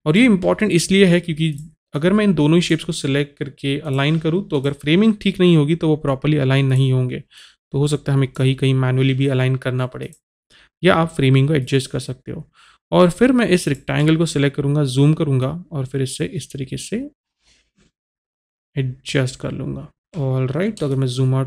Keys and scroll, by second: 20.0 typing.